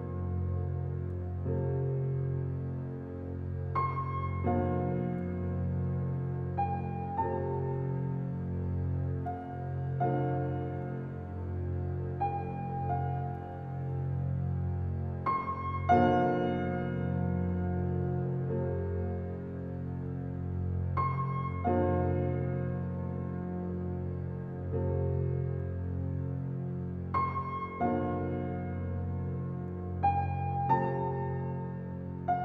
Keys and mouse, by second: 1.8 alt+middle click, 2.6 alt+click, 2.9 alt+middle click, 3.1 alt+click, 3.4 alt+middle drag, 5.6-6.1 alt+drag, 7.0 ctrl+alt+click, 7.1 typing, 7.2 ctrl+alt+middle drag, 7.5 ctrl+alt+click, 7.8 middle click, 8.0 alt+click, 8.2 alt+middle click, 8.7-9.4 alt+drag, 9.8-11.1 alt+shift+drag, 11.4-12.2 typing, 13.0 click, 14.3-15.8 drag, 16.0 click, 17.2 g, 17.6 x, 18.8-20.8 drag, 20.9-21.3 typing, 22.1 Escape, 23.1 ctrl+z, 23.1 typing, 23.6 ctrl+z, 24.3 shift+click, 25.5 g, 26.0 x, 27.2 click, 28.4 ctrl+s, 28.6 typing, 28.9 ctrl+alt+click, 29.8 alt+a, 30.2-31.5 alt+drag, 31.9 ctrl+alt+drag, 32.3-32.4 ctrl+alt+drag.